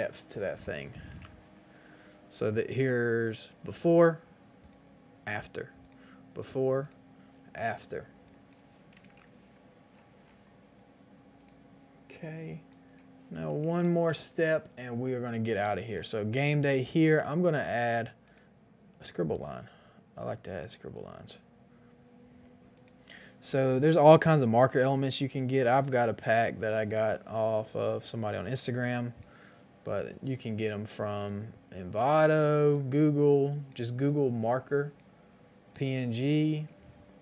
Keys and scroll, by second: 1.1 Return, 1.1 KP_0, 8.9 KP_1, 8.9 KP_0, 9.0 KP_0, 9.1 Return, 13.4 KP_7, 13.5 KP_5, 13.6 Return.